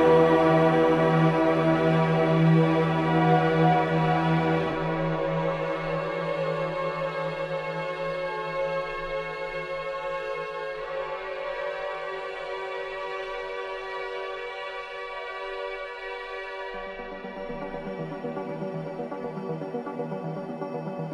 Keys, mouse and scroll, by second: 1.7 alt+click, 2.7 1, 3.1 alt+click, 6.4 ctrl+Delete, 7.4-12.7 alt+drag, 12.7 ctrl+z, 16.3-18.0 alt+drag, 18.0 alt+right click, 18.2 alt+click, 18.6 alt+right click, 20.3-21.1 drag.